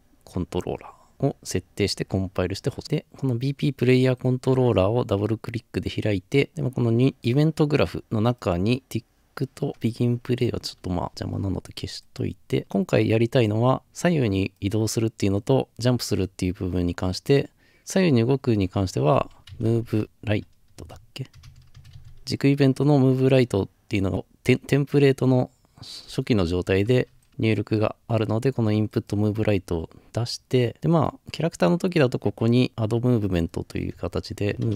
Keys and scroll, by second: 11.1 Delete, 19.7-21.9 typing, 33.9-34.7 typing.